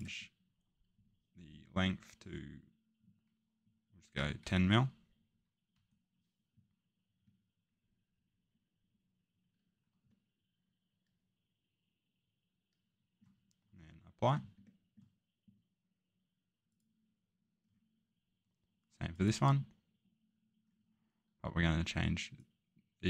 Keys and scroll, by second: 4.1 1, 5.7 0.